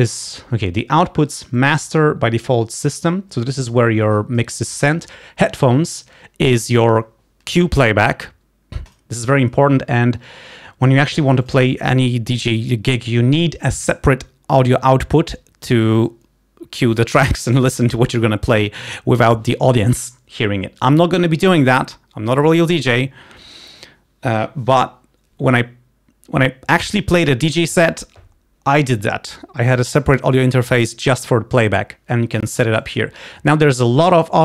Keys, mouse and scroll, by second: 1.8 click, 3.9 click, 8.9 click, 11.6 click, 32.4 click, 33.0 click.